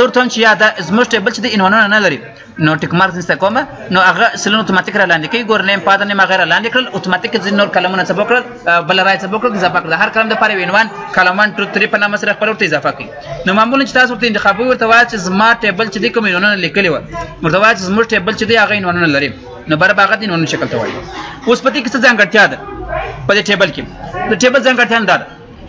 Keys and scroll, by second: 12.1 ctrl+z.